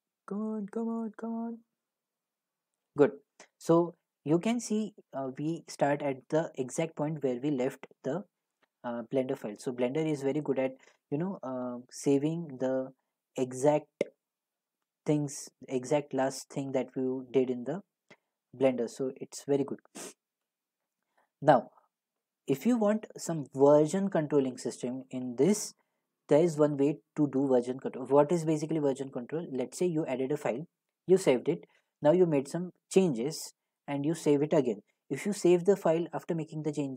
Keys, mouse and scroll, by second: 14.4 click, 15.8 click, 17.2 click, 21.4 click, 22.2-27.3 middle drag.